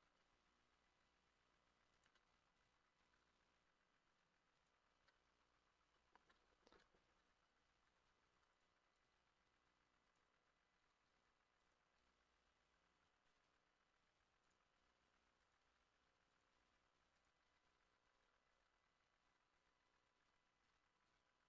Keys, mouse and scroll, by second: 0.0 click, 0.0 x, 0.3 shift+middle click, 2.0 shift+click, 2.3-2.9 scroll down 10, 3.0-5.0 drag, 3.0 g, 5.0 z, 5.2 middle click, 6.0-7.4 shift+middle drag, 7.3 scroll down 2, 7.5 shift+middle click, 7.9 scroll up 1, 8.2 shift+middle click, 10.9 r, 11.1 4, 11.2 5, 12.0 g, 14.8-21.4 drag, 14.8 r, 15.7 g, 16.6 r, 17.4-19.1 ctrl+middle drag, 17.5 ctrl+z, 17.7 ctrl+z, 18.6 ctrl+z, 19.3-21.1 typing.